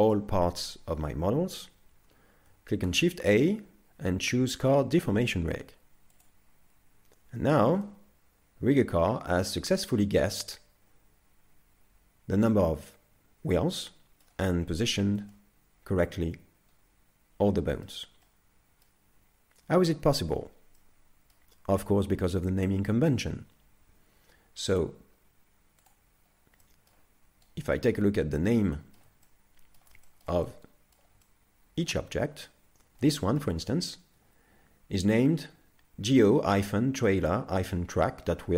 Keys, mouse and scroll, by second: 2.9 shift+a, 7.4 z, 7.9 middle click, 14.5-15.3 scroll up 3, 15.3 middle click, 18.2 middle click, 20.8 middle click, 24.7 click, 26.3-26.8 scroll down 2, 26.6 middle click, 27.5 right click, 27.9 scroll up 3, 28.8 shift+middle click, 29.2 middle click, 30.1 shift+middle click, 30.5 middle click, 31.2 shift+middle click, 33.0 middle click.